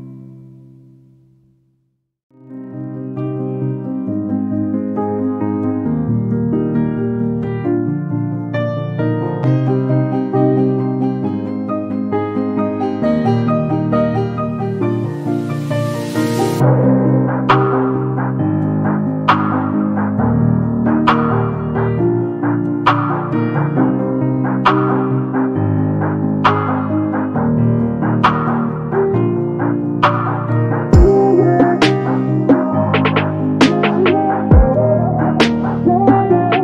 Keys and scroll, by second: 15.3-16.2 typing, 17.3 0, 17.4 Return, 24.2 5, 24.4 1, 25.5 Return, 33.6 space, 34.8 2.